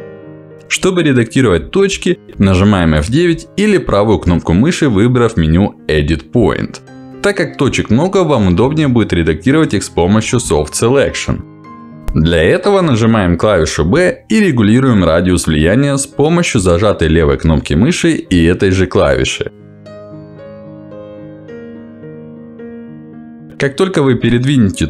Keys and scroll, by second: 11.3 w, 12.1 b, 15.9 b.